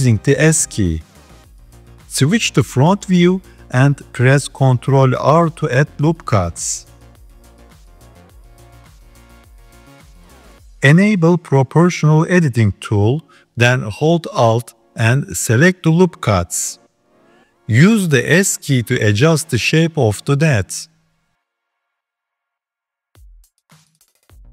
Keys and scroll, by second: 4.5 ctrl+r, 8.4 ctrl+r, 16.8 s, 19.9 s, 21.1 s, 23.2 s.